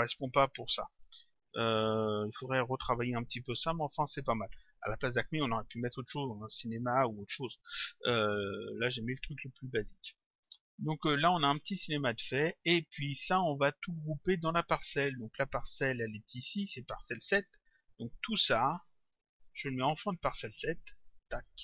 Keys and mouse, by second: 9.8 click, 16.2 click, 17.7 click, 18.9 shift+click.